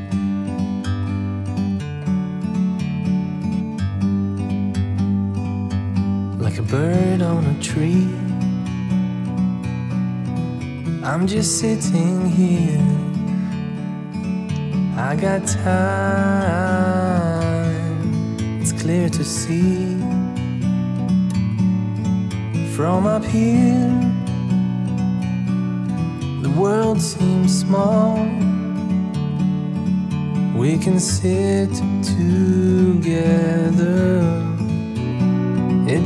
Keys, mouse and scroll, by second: 5.9 click, 10.4 click, 13.7 click, 15.4 click, 16.1 click, 17.7 click, 18.5 alt+click, 19.2 click, 20.8 click, 24.5 click, 28.8 click, 31.6 click, 33.5 click, 34.8 click.